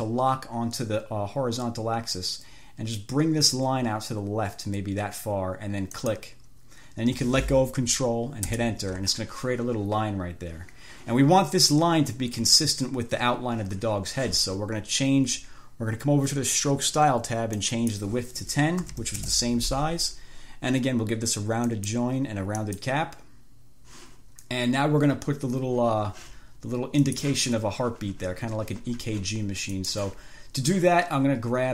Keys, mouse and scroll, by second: 6.2 ctrl+click, 8.8 Return, 17.9 click, 18.8-19.7 typing, 21.9 click, 22.9 click, 27.3 click, 30.0 click.